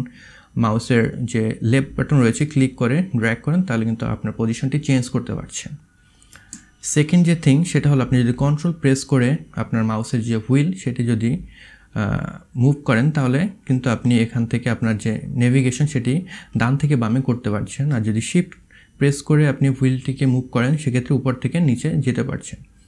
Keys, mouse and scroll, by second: 1.6-3.5 drag, 3.9-4.5 drag, 11.0-12.1 ctrl+middle drag, 12.5-14.9 ctrl+middle drag, 19.8-22.8 shift+middle drag.